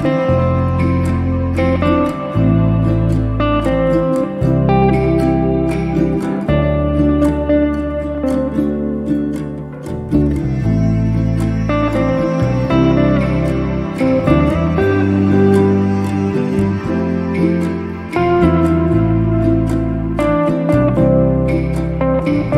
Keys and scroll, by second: 3.4 space, 7.1 f, 9.0 1, 9.3 5, 9.7 Return, 10.5 space, 14.8 t, 16.8 6, 17.6 Return, 20.1 2, 20.4 0, 21.1 Return, 22.2 r.